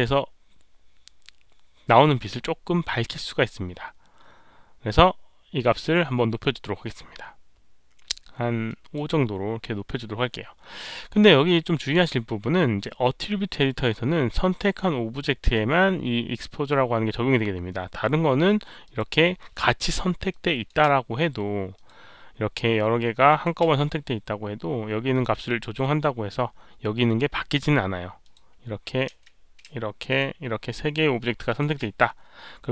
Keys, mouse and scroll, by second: 8.6 click, 18.8 click, 20.3-20.6 drag, 21.7 click, 23.2 click, 25.0 click, 28.2 click, 29.1 click, 30.0 shift+click, 31.4 shift+Caps_Lock, 31.4 shift+click.